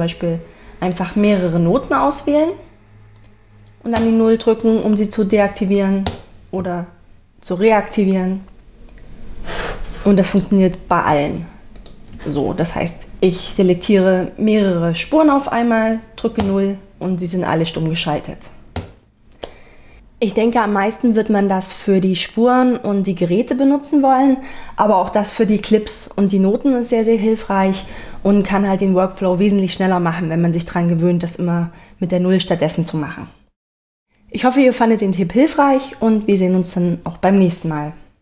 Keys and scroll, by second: 4.0 0, 6.1 0, 16.4 0, 18.8 0.